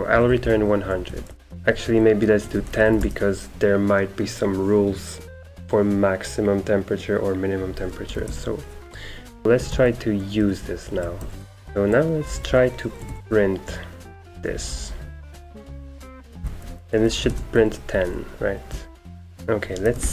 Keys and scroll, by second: 0.0-4.7 typing, 2.5 Escape, 8.0-20.1 typing.